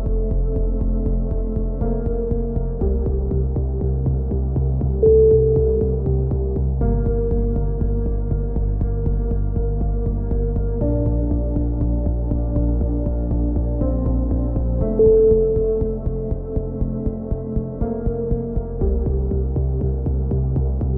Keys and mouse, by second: 3.8 a, 3.9 c, 4.6 click, 6.7 a, 7.4 c, 8.1-9.1 right drag, 8.6 g, 9.5 a, 10.1 z, 10.6 middle click, 12.9 KP_7, 13.4 z, 13.7-14.7 middle drag, 15.2 s, 18.3 z, 18.7-20.9 drag, 20.3 ctrl+z.